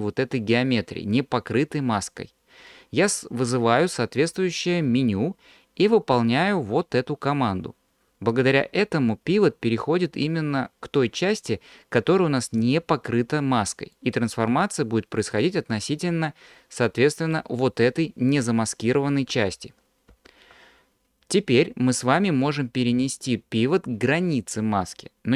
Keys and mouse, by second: 4.2 q, 14.1-17.4 drag, 19.6 ctrl+z, 20.2 ctrl+z.